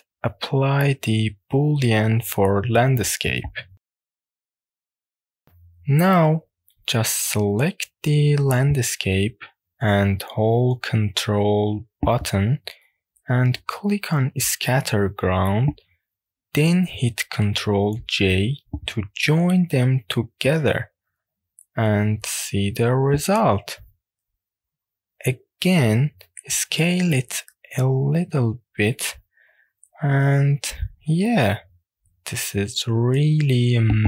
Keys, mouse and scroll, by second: 1.1-2.6 drag, 3.2 click, 3.9-4.3 scroll down 2, 4.3 click, 6.0-6.5 shift+middle drag, 6.6-7.7 middle drag, 9.0 click, 13.5 ctrl+click, 18.1 w, 19.1-20.3 scroll up 2, 21.3 ctrl+j, 22.5 scroll down 2, 23.3 click, 24.3 click, 24.7 scroll down 2, 25.1 middle click, 25.7 Tab, 26.9 s, 27.6 a, 28.3 s, 32.5 click, 33.8 Tab.